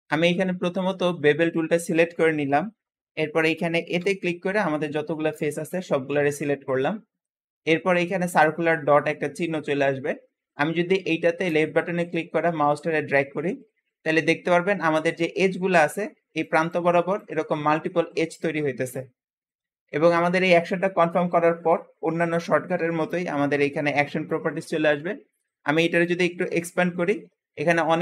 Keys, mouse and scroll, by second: 0.7-3.7 drag, 3.9 a, 11.3 click, 15.4 `, 19.9 Escape, 25.8-28.0 drag.